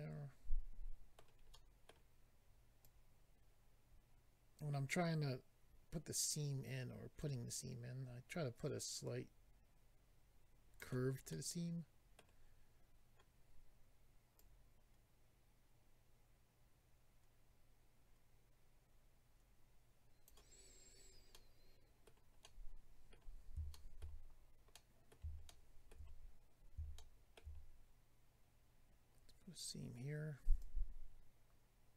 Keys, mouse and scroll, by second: 1.5 middle click, 2.8 click, 11.3 middle click, 14.4 click, 20.9-21.7 scroll down 2, 21.3 middle click, 22.4 middle click, 23.7 shift+middle click, 24.2-24.7 scroll up 3, 24.7 middle click, 26.9 shift+middle click, 28.7-30.0 scroll up 1, 30.0 scroll up 1, 30.6 click.